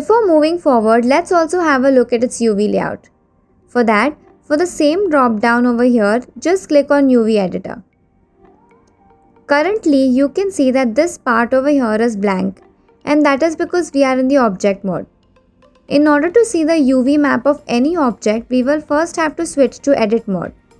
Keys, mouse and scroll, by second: 3.8-9.2 drag, 9.7-10.2 scroll up 4.